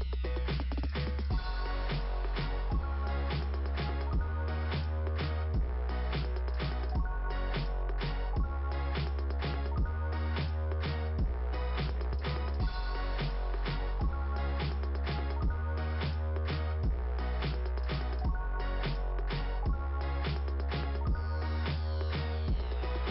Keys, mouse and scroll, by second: 6.1 click, 9.0 click, 9.3 click, 13.3 scroll down 2, 14.5 scroll down 2, 17.2 click, 22.4 click, 23.0 right click.